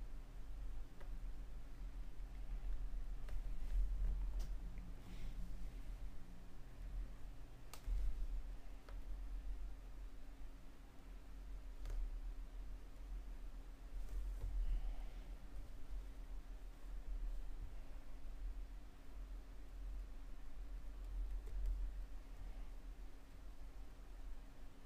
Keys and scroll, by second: 5.6 m, 20.0 [.